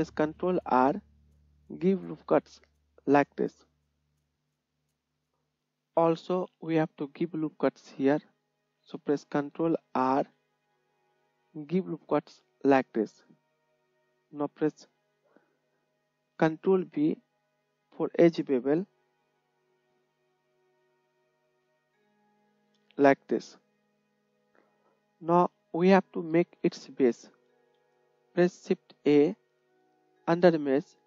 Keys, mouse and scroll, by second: 0.8 ctrl+r, 5.3 right click, 5.8 click, 5.9 right click, 6.0-10.5 drag, 10.2 ctrl+r, 10.5-12.1 right drag, 12.1-14.8 drag, 14.8-21.9 right drag, 16.8 ctrl+b, 21.9-22.9 drag, 22.9-24.7 middle drag, 24.5 KP_1, 24.7 shift+right drag, 25.0-25.9 shift+middle drag, 25.9-26.5 drag, 26.5 middle click, 26.6-28.1 drag, 27.6 KP_1, 28.9 shift+a, 29.4 middle drag, 29.6-30.5 drag.